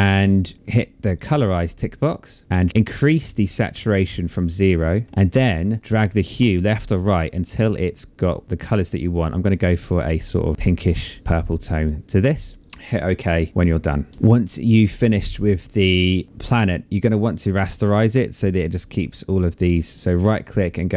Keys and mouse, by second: 0.5 click, 2.4 click, 3.2 click, 5.1 click, 9.1 click, 11.1 click, 14.0 click, 19.4 right click, 20.5 click.